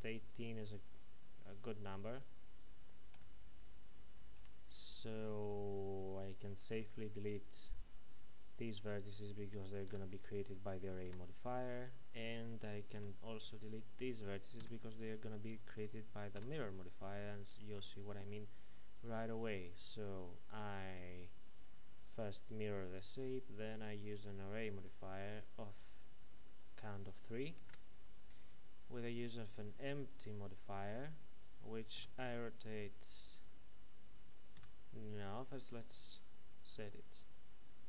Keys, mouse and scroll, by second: 0.5-1.0 scroll up 1, 1.0-2.0 scroll down 1, 2.0 Tab, 3.1 a, 4.4 c, 5.7-6.6 scroll down 1, 6.6 click, 9.9 Escape, 11.0 x, 11.6 click, 12.9 c, 13.6 click, 14.6 Escape, 16.4 x, 16.9 click, 17.7 Tab, 19.0 click, 27.7 shift+a, 29.4 click, 32.0 r, 34.6 Escape, 35.3 right click, 37.1 click.